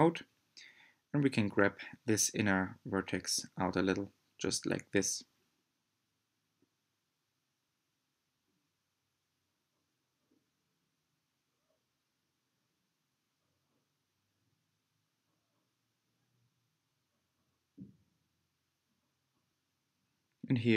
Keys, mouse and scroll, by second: 0.5 g, 4.5 Tab, 5.1-10.8 middle drag, 12.0-12.4 scroll up 3, 12.4-13.6 middle drag, 13.6 Tab, 15.0 2, 16.5 alt+click, 19.1 click.